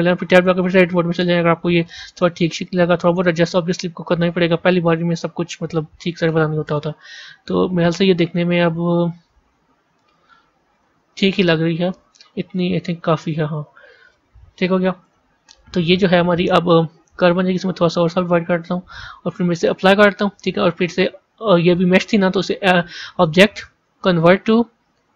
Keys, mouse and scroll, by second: 0.3 b, 4.0 click, 6.6 KP_0, 10.6 click, 14.9 Tab, 17.1-25.1 drag.